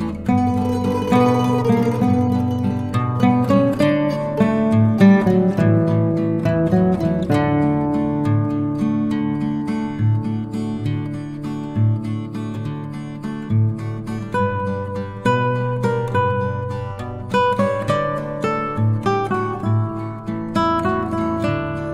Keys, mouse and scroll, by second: 0.0 shift+click, 1.2 click, 2.0-2.3 click, 2.4 ctrl+z, 3.3 click, 4.4 ctrl+d, 5.5 shift+click, 6.8 click, 8.7 Delete, 10.1 click, 10.7 ctrl+c, 10.9-11.8 click, 14.0 ctrl+shift+v, 15.2 click, 16.4 click, 16.8 ctrl+c, 17.0-18.0 click, 20.0 ctrl+alt+v, 21.2-21.9 drag.